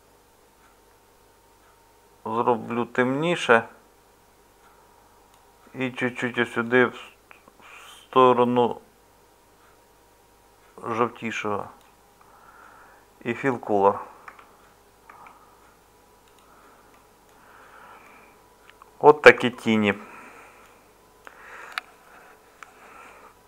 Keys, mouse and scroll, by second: 14.2 Tab, 15.1 Tab.